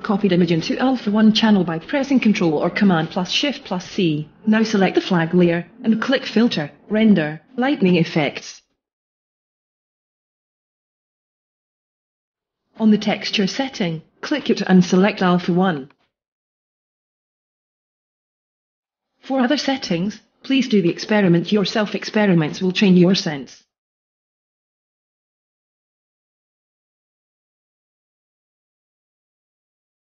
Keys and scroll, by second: 0.5 shift+super+v, 2.2 super+d.